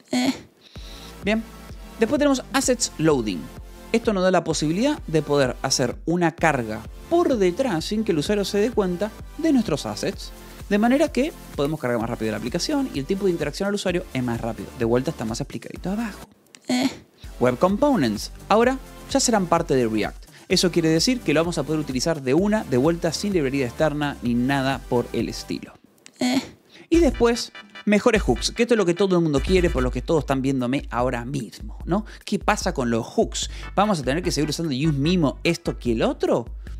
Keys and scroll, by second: 1.0-2.4 typing, 17.2 j, 17.8 shift+v, 19.4 Escape, 26.7 j, 28.0 shift+v.